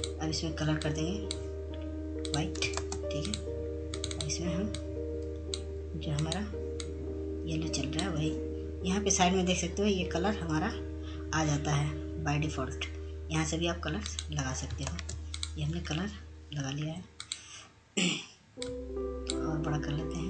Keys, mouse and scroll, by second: 7.3 ctrl+space, 7.7-14.6 drag, 18.7 click, 19.4 ctrl+space, 20.0 click.